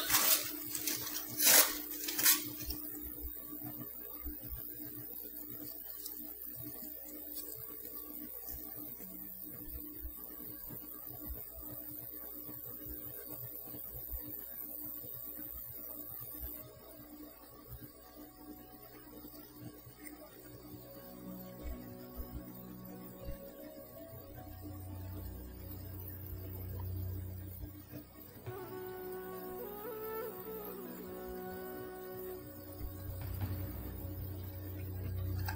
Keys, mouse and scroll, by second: 19.3 click, 20.5-21.6 shift+middle drag, 22.1 f, 22.8-24.4 ctrl+drag, 25.1 click, 25.7 click, 26.4 click, 27.5-31.6 ctrl+drag, 33.3 click, 34.2-35.5 typing.